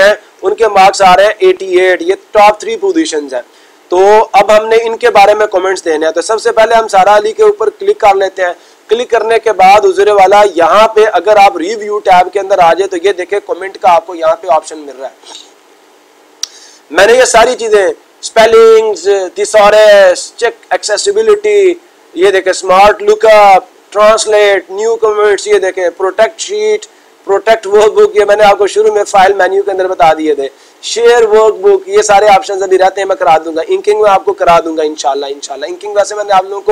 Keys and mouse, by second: 1.7 click, 7.0 click, 11.2 click.